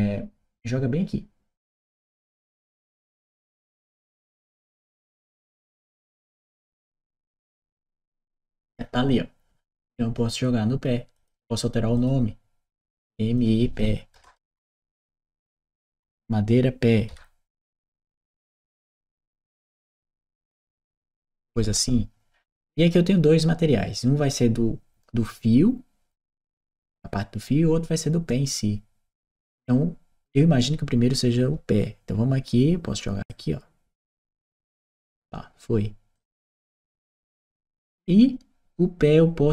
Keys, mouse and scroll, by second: 3.0 click, 4.8 click, 6.2 click, 10.9 click, 11.7 click, 12.8 click, 14.0 BackSpace, 17.8 shift+m, 19.0 shift+p, 20.1 e, 20.5 Return, 29.2 click, 33.1-34.3 drag, 35.9 click.